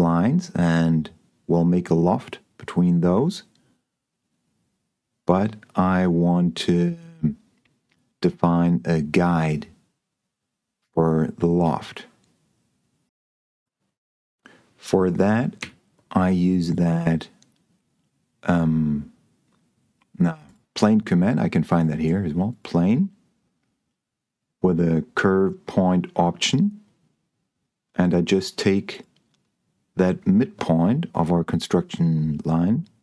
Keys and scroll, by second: 15.9 s.